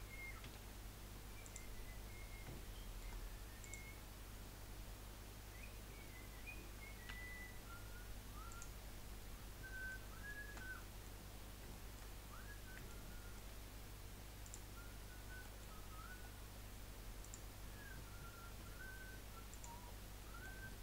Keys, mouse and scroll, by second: 0.4 1, 1.4 click, 2.0-2.5 scroll up 1, 2.5-3.6 shift+middle drag, 3.6 click, 7.0 g, 8.8-9.1 scroll down 4, 9.3-11.3 middle drag, 11.3 scroll up 1, 11.7 shift+middle click, 12.1-12.8 scroll up 2, 12.8-14.4 shift+middle drag, 14.4 click, 15.4 shift+middle click, 15.7-16.2 scroll up 2, 16.2 scroll down 1, 17.2 click, 18.6 g, 19.8 scroll down 7, 20.2 middle click.